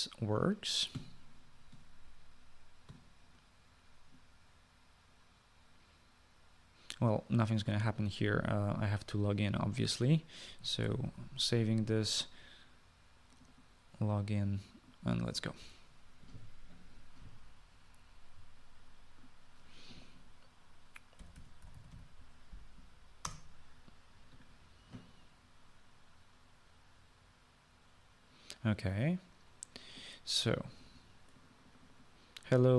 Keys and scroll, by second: 12.0 ctrl+s, 22.1-23.5 typing, 24.3 Return.